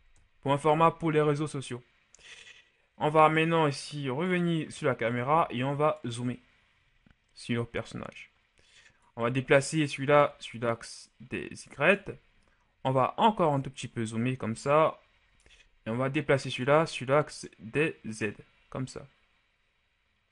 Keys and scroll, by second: 0.4 Return.